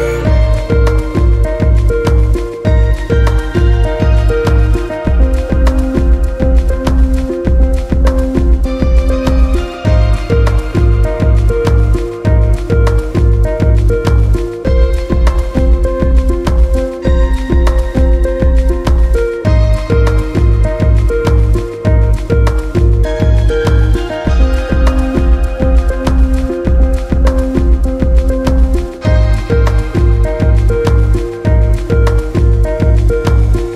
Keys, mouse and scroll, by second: 0.0 click, 2.0-2.7 scroll down 1, 2.7 click, 3.7-5.2 right drag, 5.2-5.8 scroll up 2, 5.8-6.9 shift+middle drag, 6.9 s, 9.4-10.5 scroll down 7, 10.5 click, 10.8-11.4 scroll down 1, 11.4 scroll down 4, 11.4-13.4 scroll up 14, 13.4 drag, 15.1 s, 17.7-18.4 middle drag, 18.4 drag, 19.2 s, 20.4-22.6 scroll down 5, 22.6 Tab, 24.0 KP_1, 24.9 alt+z, 25.1-25.4 scroll up 2, 25.4 click, 27.5-29.4 drag, 29.4-30.1 scroll down 4, 30.3 Tab, 31.1 Tab, 32.4 shift+s.